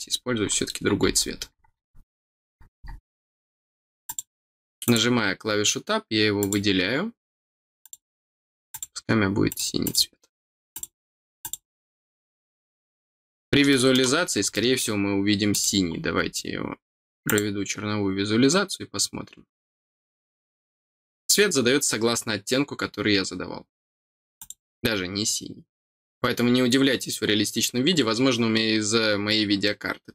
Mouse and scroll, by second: 4.0 click, 4.8 click, 6.3 click, 7.8 click, 8.6 click, 9.4 click, 9.8 click, 10.7 click, 11.3 click, 13.6 middle click, 14.5 middle click, 15.5 click, 17.2 click, 24.3 click, 27.2 middle click, 27.4-27.8 scroll down 1.